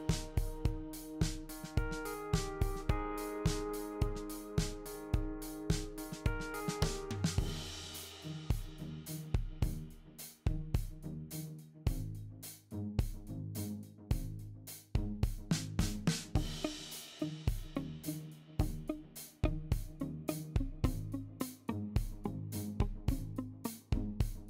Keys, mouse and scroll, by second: 12.4 click, 17.0 ctrl+l, 17.0 shift+click, 21.8 shift+click.